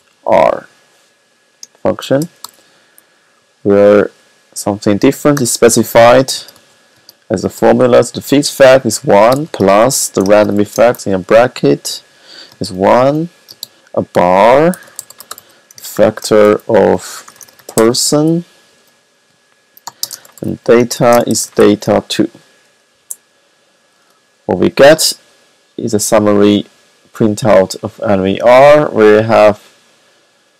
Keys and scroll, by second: 0.0-0.4 typing, 1.7-2.3 typing, 5.0 y, 9.0-11.0 typing, 12.8 alt+7, 13.5-22.4 typing.